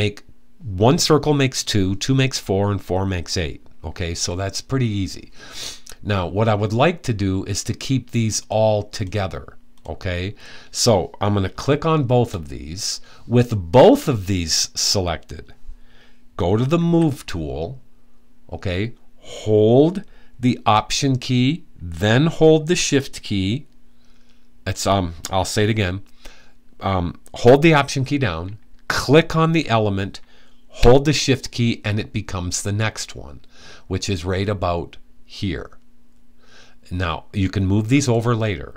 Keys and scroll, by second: 16.4 v.